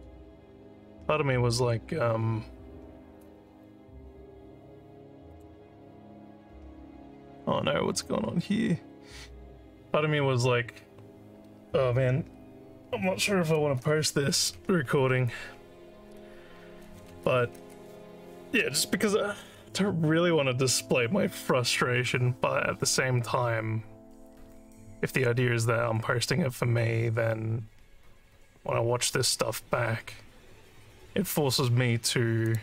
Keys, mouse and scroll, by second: 5.3 click, 32.5 click.